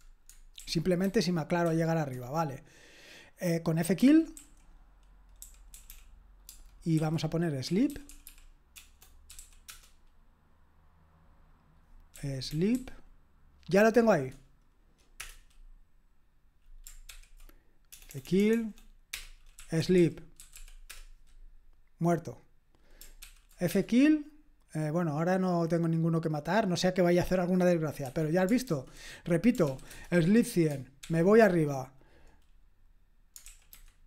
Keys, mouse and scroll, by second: 0.5 super+l, 1.0 super+h, 1.6 super+k, 4.1-9.8 typing, 11.9-13.2 typing, 17.1 ctrl+p, 17.9-21.0 typing, 19.1 Return, 23.2 ctrl+p, 23.7 Return, 28.0 Escape, 28.6 super+j, 29.6 ctrl+p, 29.9 Return, 31.0 super+p, 33.4 super+l, 33.7 super+h.